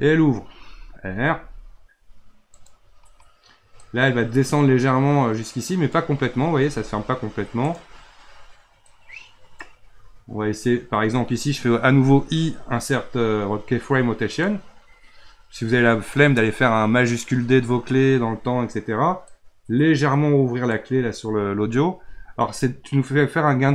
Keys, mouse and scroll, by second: 1.2 r, 3.8-6.5 drag, 6.5 r, 8.9-12.0 drag, 12.4 typing, 19.3-22.0 drag, 22.0 r.